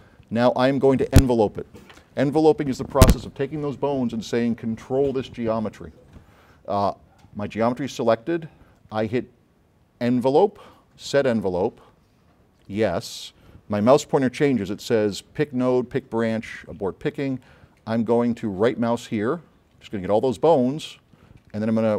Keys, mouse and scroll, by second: 10.2 click, 11.1 click, 19.2 middle click.